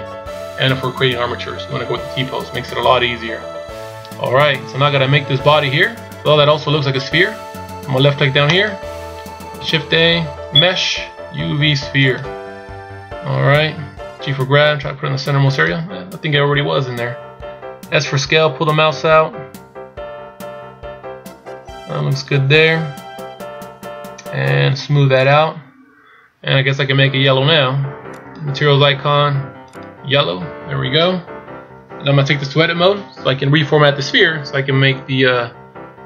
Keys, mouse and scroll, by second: 4.3-5.0 shift+scroll down 1, 8.7 click, 9.7 shift+a, 25.3 click, 28.2 click.